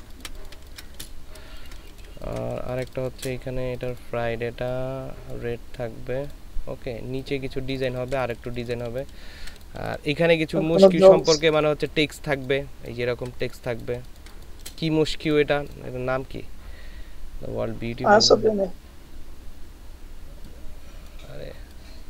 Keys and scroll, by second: 2.1 c, 2.6 s, 7.9 ctrl+space, 11.3 ctrl+space, 15.7 ctrl+space.